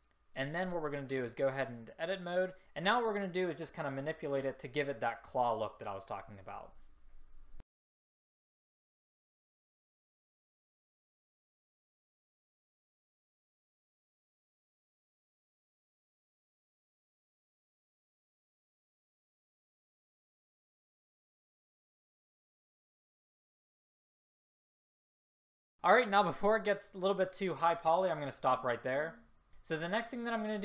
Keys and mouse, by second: 2.2 click, 8.1 middle click, 8.8 s, 9.0 middle click, 10.4 a, 10.9 r, 11.5 right click, 12.4 middle click, 13.9-16.1 typing, 16.5 click, 16.7 middle click, 17.3 click, 17.3 s, 17.6 middle click, 17.8 middle click, 17.9 s, 18.3 a, 18.8 click, 19.0 click, 19.1 s, 19.5 middle click, 19.8 click, 20.0 middle click, 20.1 click, 20.3 a, 20.6 middle click, 21.1 click, 21.7 middle click, 22.0 ctrl+z, 22.1 ctrl+z, 22.3 click, 22.3 right click, 22.3 middle click, 22.5 a, 24.1 click, 24.5 s, 24.6 middle click, 24.8 middle click, 24.9 s, 25.1 middle click, 25.1 a, 25.6 middle click.